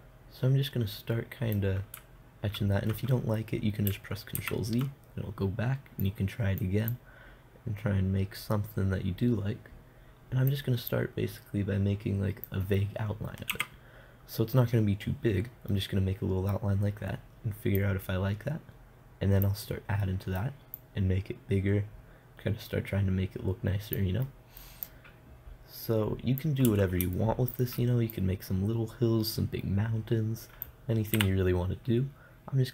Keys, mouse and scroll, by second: 4.8 ctrl+z, 6.4-9.3 drag, 11.4-13.2 drag, 14.0 KP_0, 16.2-17.9 middle drag, 18.2-20.1 drag, 20.1-21.2 middle drag, 21.2-23.1 drag, 24.7 middle click, 25.3-27.2 drag, 27.2 middle click, 27.6 click, 27.7-30.2 middle drag, 28.6-31.6 drag, 31.6 t.